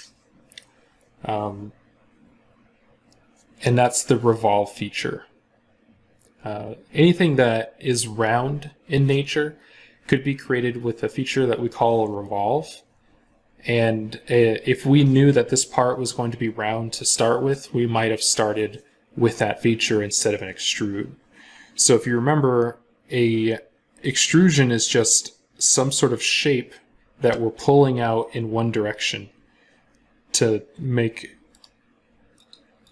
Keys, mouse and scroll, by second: 31.4 right click, 32.7 double click.